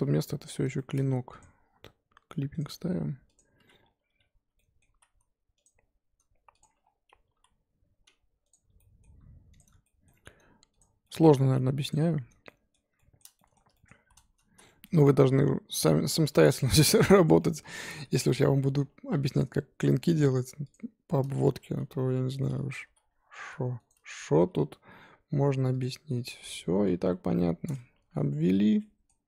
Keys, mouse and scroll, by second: 0.1-0.7 scroll up 2, 0.7 shift+middle click, 1.4 click, 2.5 click, 3.8-4.4 scroll down 1, 4.4 z, 4.5 middle click, 4.8 z, 5.6 click, 6.6 ctrl+click, 6.8-7.3 scroll down 1, 7.3 ctrl+z, 8.5 ctrl+click, 8.7 middle click, 9.6 ctrl+click, 9.8 shift+middle click, 10.8 ctrl+click, 11.0 middle click, 11.9 ctrl+click, 12.4-13.9 middle drag, 13.9 z, 14.5 z, 14.6-16.2 middle drag, 16.2 g, 17.4 middle click, 18.3-18.7 scroll up 3, 18.7 2, 19.1 1, 19.4 click, 20.7 x, 21.4 ctrl+z, 21.9 middle click, 22.7 g, 24.2 g, 26.3 scroll down 3, 27.7 m, 27.9 Tab, 28.1 middle click, 28.6 Tab, 28.8 middle click, 29.1 scroll up 2.